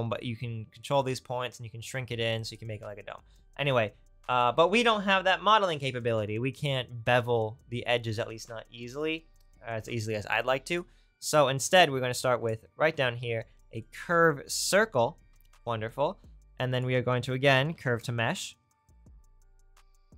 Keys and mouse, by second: 4.4-10.7 drag, 15.6 shift+a.